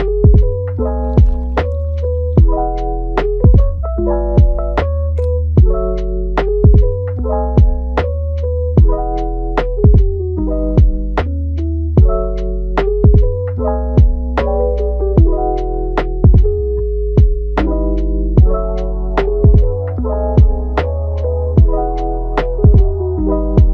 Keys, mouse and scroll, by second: 0.5 scroll down 1, 0.6 middle click, 1.5-3.4 drag, 3.4 middle click, 4.3 click, 4.6 middle click, 5.1 scroll down 3, 5.3 middle click, 6.0 scroll up 2, 6.2-8.2 middle drag, 8.2-9.9 drag, 9.9 middle click, 10.8 click, 11.2 middle click, 11.8 click, 12.3 middle click, 13.2-14.9 drag, 14.9 middle click, 15.4 scroll down 1, 15.7-18.7 middle drag, 19.2 click, 19.9 scroll up 3, 20.2-21.3 shift+middle drag, 21.3-22.0 scroll up 1, 22.0-23.1 middle drag, 23.1-23.7 drag.